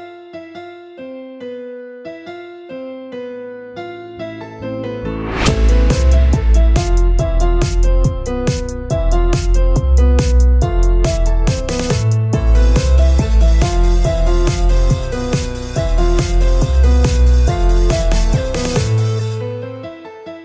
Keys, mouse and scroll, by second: 0.5-1.6 middle drag, 1.6 click, 2.3 KP_7, 3.2-3.8 scroll down 2, 3.8 shift+middle click, 4.3 KP_7, 4.8 z, 5.1-5.7 scroll up 1, 5.7 scroll up 6, 5.7 r, 6.3 g, 7.6 a, 7.8 a, 7.9-8.3 scroll down 3, 8.3 shift+middle click, 9.0-9.5 scroll up 2, 9.5 click, 9.9 g, 11.1 r, 11.8 g, 12.4 a, 12.6 a, 13.1 shift+middle click, 13.8 click, 14.2 g, 15.2-16.4 typing, 15.5 scroll down 3, 15.6 Tab, 16.8-18.6 middle drag, 18.6-19.2 scroll up 1, 19.2-19.7 shift+middle drag, 19.7-20.4 scroll down 1.